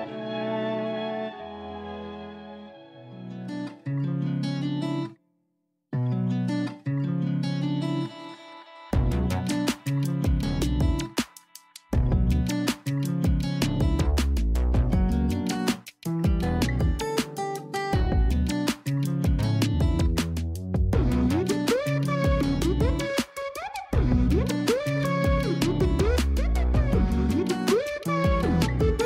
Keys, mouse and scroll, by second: 0.6-1.9 middle drag, 1.9 click, 4.3-4.9 scroll down 6, 4.9-5.3 scroll up 1, 5.3-6.6 middle drag, 6.6-8.7 scroll up 5, 8.7-10.1 middle drag, 10.1-13.1 drag, 14.4-17.4 drag, 18.7-19.3 scroll down 5, 19.3 middle click, 19.8-21.1 scroll up 7, 21.1 click, 22.8-26.1 middle drag, 26.1-29.0 drag.